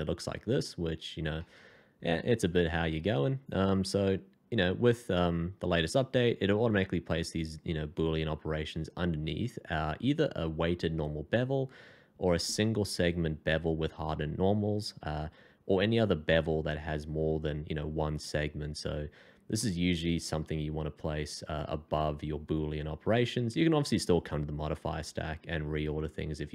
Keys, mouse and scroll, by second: 19.6 middle click.